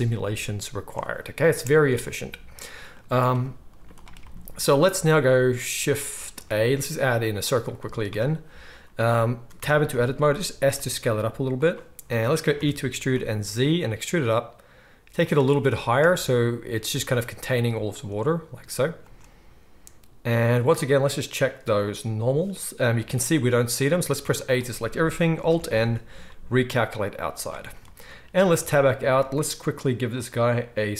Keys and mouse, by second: 1.5 space, 3.0 z, 3.7 z, 6.3 shift+a, 9.5 Tab, 10.4 s, 10.8-21.1 shift+right drag, 12.5 e, 16.0 space, 20.3 space, 21.1-30.9 middle drag, 22.9 z, 24.2 a, 25.4 alt+n, 27.1 z, 30.1 Tab.